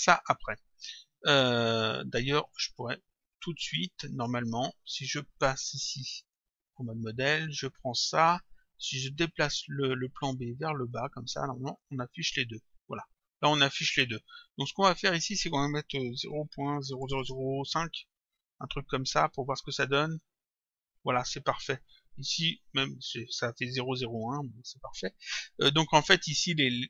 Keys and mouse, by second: 1.2 click, 2.4 click, 6.2 click, 7.6 click, 10.3 click, 11.6 click, 14.8 click, 18.1 Return, 20.1 click.